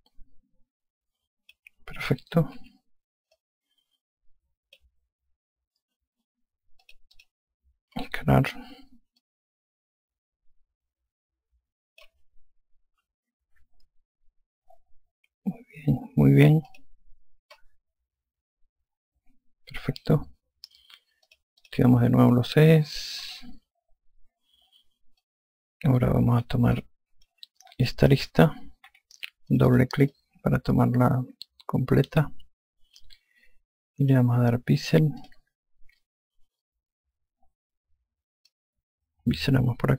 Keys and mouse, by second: 3.4 5, 4.2 click, 7.7 click, 10.0 click, 13.7 F1, 17.5 click, 22.1 click, 24.1 e, 26.1 alt+click, 27.6 alt+click, 29.7 2, 30.4 click, 31.0 alt+click, 36.1 click, 39.4 click.